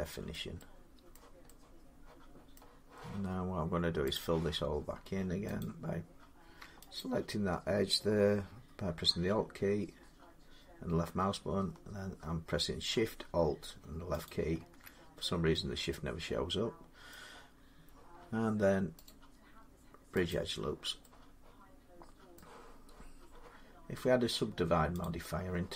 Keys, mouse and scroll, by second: 0.1 middle click, 1.0 middle click, 1.3 scroll down 1, 1.4 scroll up 3, 2.3 scroll, 4.0 click, 4.2 middle click, 5.4 click, 6.8 alt+click, 14.1 click, 16.9 middle click, 18.9 right click, 20.1 click, 22.2 middle click, 24.9 click.